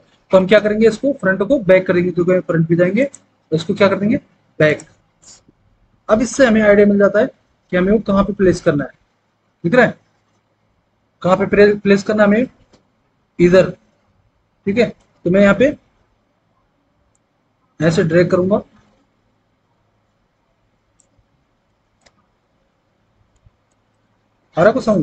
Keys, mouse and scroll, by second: 7.0 F4, 7.2 F3, 9.1 F4, 15.4 F4, 15.6 F3, 21.3 alt+w, 21.9 alt+w.